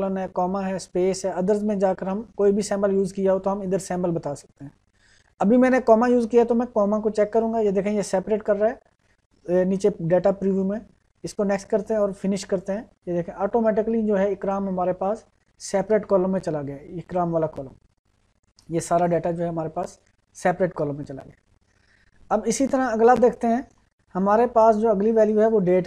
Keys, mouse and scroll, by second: 3.7 click, 11.5 click, 15.9-18.2 drag, 19.3 click, 22.6-23.8 drag.